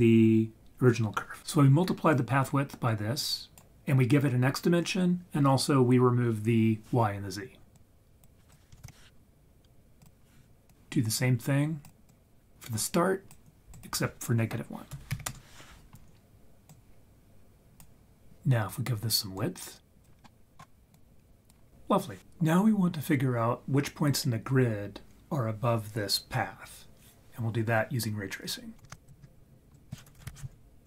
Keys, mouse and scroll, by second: 1.4 ctrl+z, 2.1 click, 2.6-3.6 drag, 7.7 click, 8.8 shift+d, 10.0 click, 10.7-11.9 drag, 12.1-13.4 drag, 13.7-15.3 drag, 16.7 click, 16.9-17.8 drag, 19.4 click, 20.2 middle click, 20.6 scroll down 1, 20.9 click, 28.7 ctrl+z, 28.9 ctrl+right click, 29.7-30.8 drag.